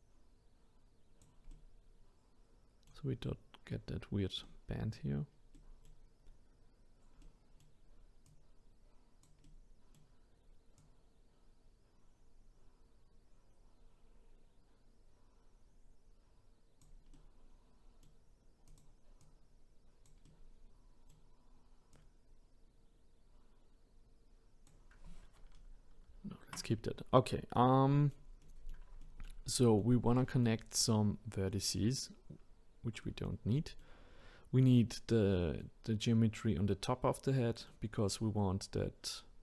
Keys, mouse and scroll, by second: 1.5-8.3 middle drag, 8.3 click, 9.4-10.8 middle drag, 10.8 click, 17.1-18.7 middle drag, 18.7 click, 19.2 click, 20.2-21.9 middle drag, 21.9 click, 25.9 ctrl+z, 26.9-27.5 scroll down 2, 27.5-39.4 middle drag.